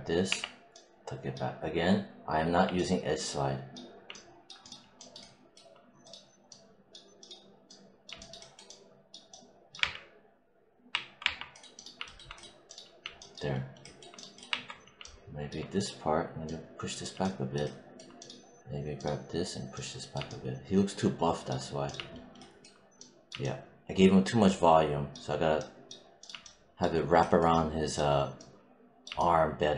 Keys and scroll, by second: 0.2 w, 9.7 3, 14.4 1.